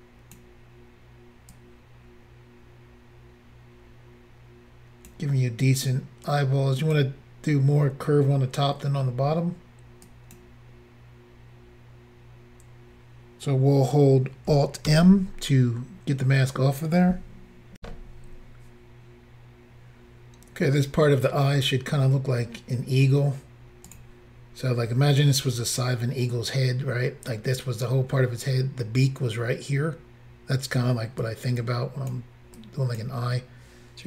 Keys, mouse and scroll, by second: 1.5 click, 6.3 click, 10.1 click, 14.9 alt+m, 17.8 Insert, 20.4 scroll up 1, 23.9 click, 30.1-31.1 scroll up 2, 31.2 click, 32.6 click.